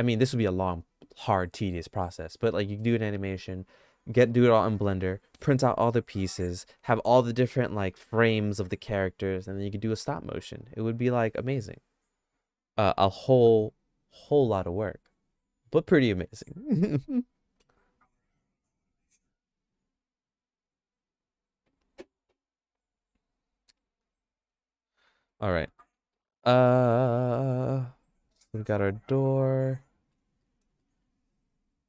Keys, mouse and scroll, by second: 25.3 middle click, 25.8 middle click, 26.1-30.1 shift+middle drag, 30.4 middle click, 30.8-31.8 shift+middle drag.